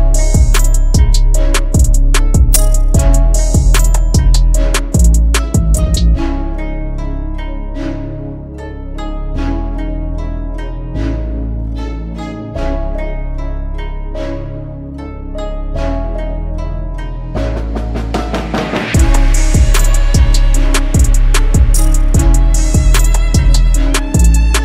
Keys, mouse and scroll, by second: 1.2 alt+click, 5.1 double click, 7.2 right click.